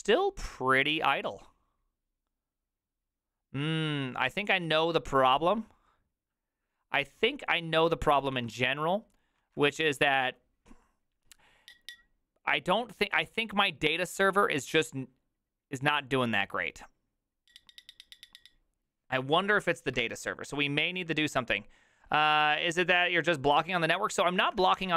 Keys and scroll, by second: 9.4 alt+{, 9.4 ctrl+a, 9.6 2, 24.4 alt+{, 24.4 ctrl+a, 24.6-24.9 typing.